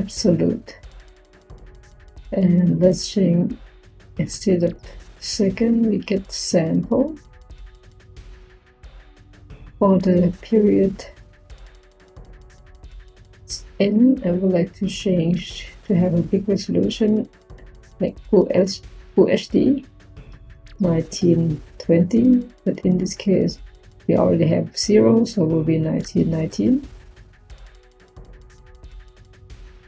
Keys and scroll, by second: 20.3 1, 21.0 9, 25.8 1, 26.3 9, 28.7-29.5 typing.